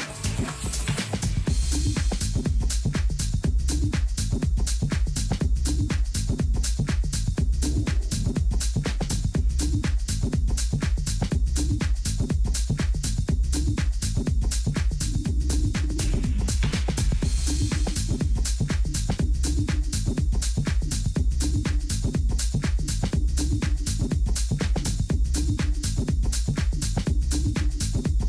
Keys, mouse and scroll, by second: 0.0-6.1 middle drag, 6.8 ctrl+r, 11.3-13.7 middle drag, 16.3-19.3 middle drag, 22.9-24.8 middle drag, 25.3-26.7 middle drag, 26.7-28.2 drag.